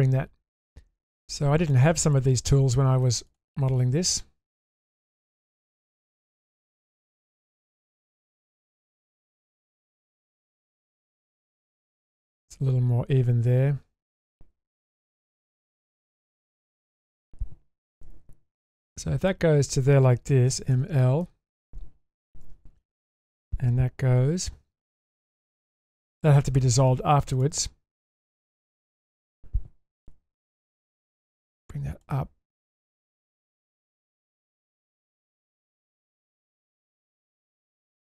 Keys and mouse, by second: 1.6 click, 2.3 middle click, 3.7-5.8 middle drag, 7.0-9.9 middle drag, 10.2 Tab, 11.5-14.8 middle drag, 15.9-16.2 shift+middle drag, 16.8 Tab, 18.0 1, 18.6 click, 19.2 shift+click, 20.5 m, 21.2 middle click, 22.4 2, 24.5 ctrl+x, 24.9 middle click, 25.7 middle click, 26.9 click, 27.3 click, 27.9-29.1 middle drag, 30.0 1, 31.2-32.0 drag, 32.5-34.4 middle drag, 35.6-37.1 middle drag, 37.9 Tab.